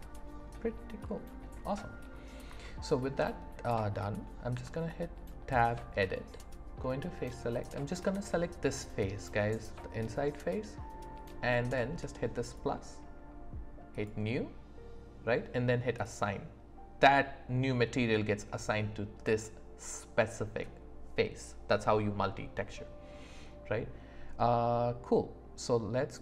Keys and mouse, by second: 1.0 click, 1.0 right click, 2.6 shift+middle click, 4.5 Tab, 12.4 click, 14.0 click, 16.0 click.